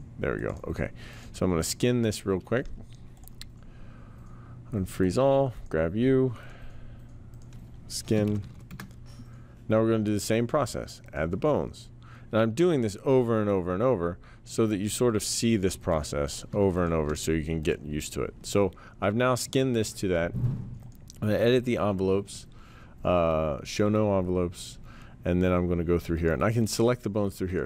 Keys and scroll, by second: 7.9-9.1 typing.